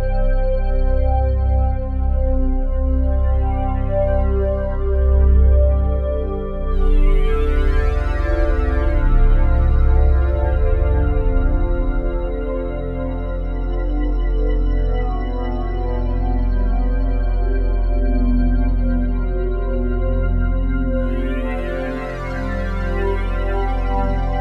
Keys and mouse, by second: 1.8 space, 5.4 click, 9.5-13.7 drag, 13.7 space, 14.9 click, 16.3 click, 17.2 click, 20.5 space, 21.5 click, 21.9 click.